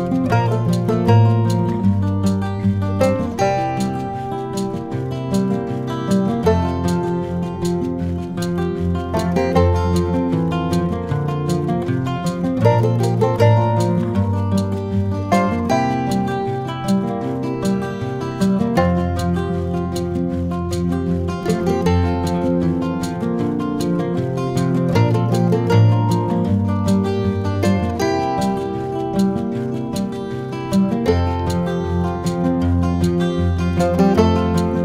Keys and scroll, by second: 10.4 r, 21.8 1, 26.8 r.